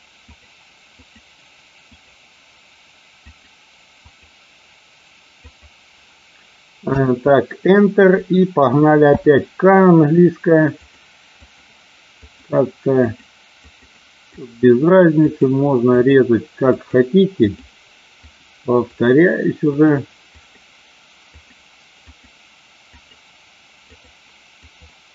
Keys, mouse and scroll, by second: 8.9 k.